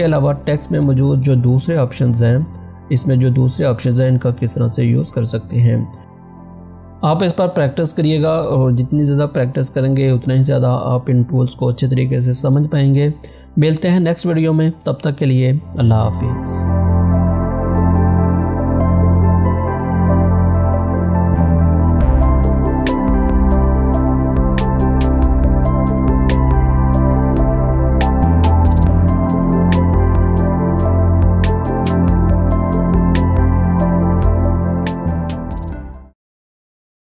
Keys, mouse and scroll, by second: 0.3-4.6 drag, 5.6 click.